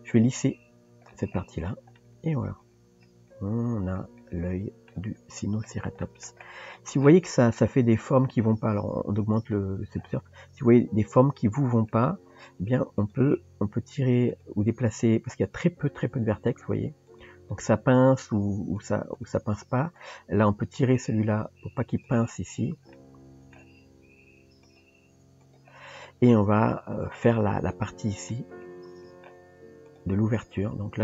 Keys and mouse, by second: 2.0-4.9 middle drag, 6.0 middle drag, 9.3 click, 11.9 Tab, 13.0 click, 13.5 g, 14.7 click, 17.1 click, 20.0 click, 22.9 middle click, 25.3 g, 26.1-27.2 middle drag, 28.3-29.3 middle drag, 29.9 click.